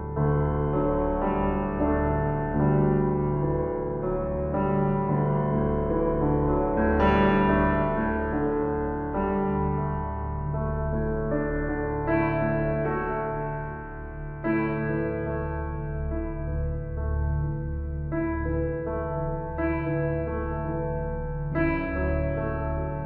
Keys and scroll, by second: 16.2 ctrl+t.